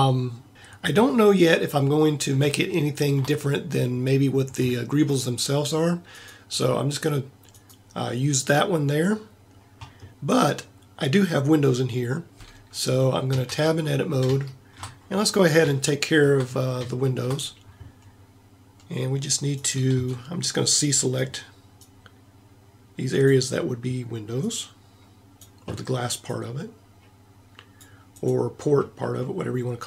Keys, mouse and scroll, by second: 13.3 Tab, 19.9 c.